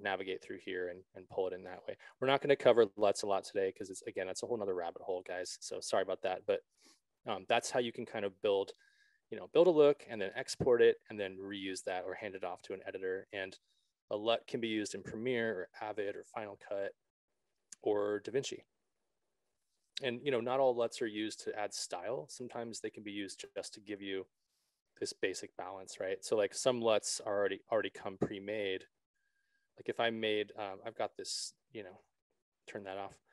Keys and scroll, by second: 30.8 s.